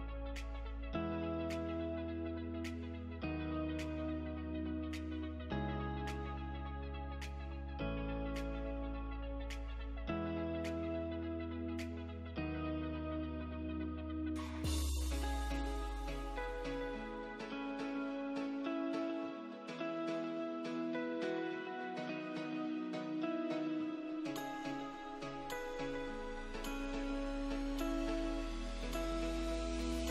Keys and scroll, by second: 2.8 F3, 4.4 space, 4.7 F3, 5.0 Escape, 5.2 F2, 6.8 Delete, 9.8 ctrl+g, 11.2 ctrl+z, 16.0 space, 23.4 ctrl+r, 24.0 F3, 24.2 Escape, 24.4 F2, 25.8 Escape.